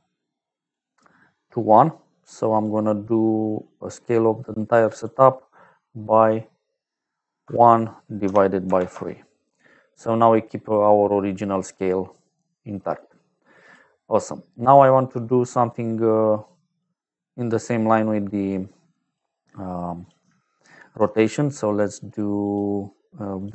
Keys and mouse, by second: 1.6 click, 2.5 click, 3.8 click, 4.8 click, 7.3 KP_1, 8.1 KP_Divide, 8.6 KP_3, 8.8 Return, 12.4 middle click, 13.3 click, 14.3 middle click, 14.8 middle click, 15.6 click, 18.0 click, 18.9 click, 19.9 click, 20.9 shift+d, 21.6 click, 22.3 click, 23.3 click.